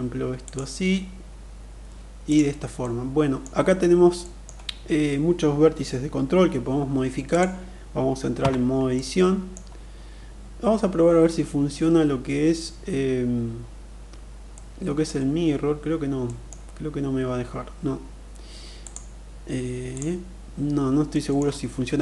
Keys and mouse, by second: 0.0 click, 2.2-2.9 middle drag, 3.7 middle click, 6.7 click, 7.9 Tab, 8.4 middle click, 14.0 middle click, 15.6 middle click, 18.3 click, 20.6 middle click.